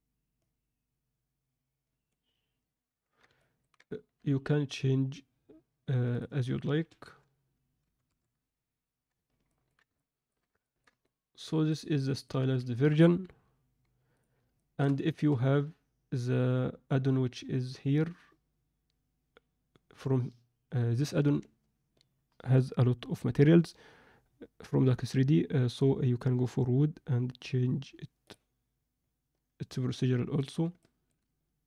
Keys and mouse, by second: 0.4-2.4 drag, 3.4-3.7 ctrl+alt+middle drag, 6.0-9.0 drag, 9.5 ctrl+middle drag, 10.0-10.5 alt+shift+middle drag, 10.7 ctrl+alt+middle drag, 11.1-11.8 middle drag, 12.0 shift+middle drag, 12.7 ctrl+alt+middle click, 14.1 drag, 14.5-14.8 shift+middle drag, 30.8 alt+middle click.